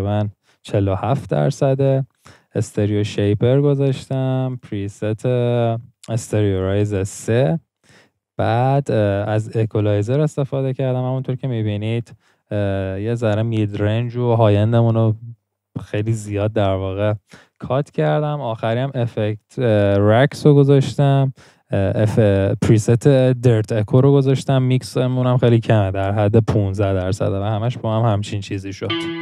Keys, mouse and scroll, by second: 28.9 middle click.